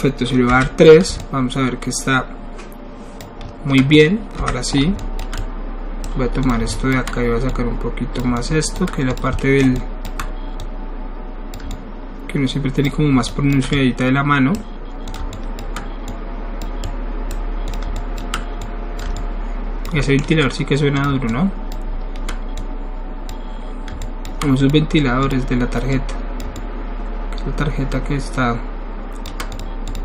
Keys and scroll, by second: 0.5 3, 4.4 1.